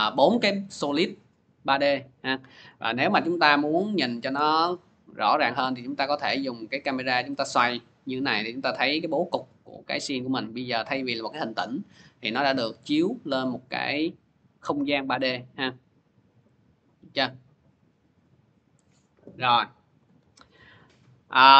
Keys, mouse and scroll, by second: 2.4-7.5 drag, 3.6 c, 18.7-20.2 drag, 19.9 ctrl+z.